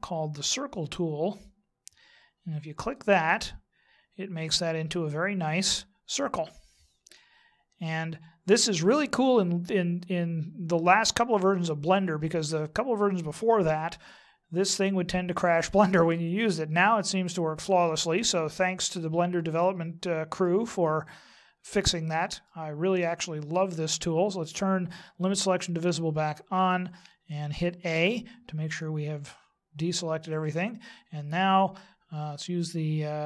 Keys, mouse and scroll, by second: 0.3 click, 2.8 click, 4.9 middle click, 21.0 middle click, 24.4 click, 26.7 middle click, 27.9 a, 28.7 middle click.